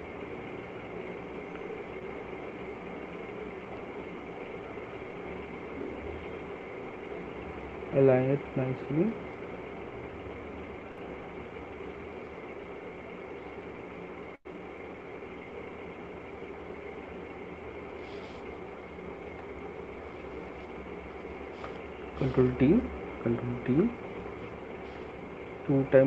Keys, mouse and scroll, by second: 0.6 click, 1.6 click, 2.2 click, 3.3 click, 4.5 click, 6.1 click, 8.0 click, 10.0 click, 12.4 click, 14.8 click, 16.4 click, 17.2 click, 17.8 click, 19.4 right click, 20.4 click, 20.7 shift+click, 21.7 click, 22.7 ctrl+d, 23.4 ctrl+d, 25.4 click.